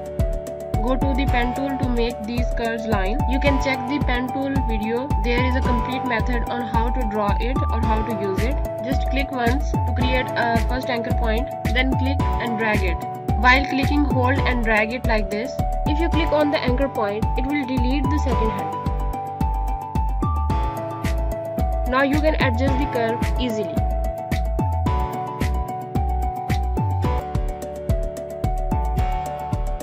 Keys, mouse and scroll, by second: 5.9 right click, 6.8 click, 8.2 z, 9.4 alt+scroll down 1, 10.8 click, 22.1 click, 29.7 click.